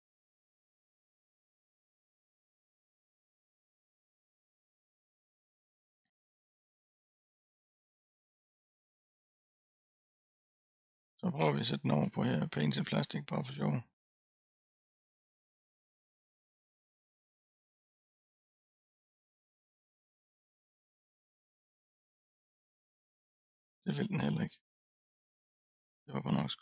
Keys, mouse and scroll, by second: 0.3-1.5 middle drag, 1.5 scroll down 1, 1.5-2.4 scroll up 1, 2.4 scroll down 3, 2.6-3.1 scroll up 1, 3.1-3.9 scroll down 3, 3.9-4.7 scroll up 1, 4.7-5.4 scroll up 1, 5.4 click, 8.7 click, 11.2-12.8 scroll up 32, 14.0 click, 14.6 click, 16.5 click, 19.3 click, 22.5-24.7 drag, 24.7-25.0 scroll down 2, 25.7-26.6 scroll up 2.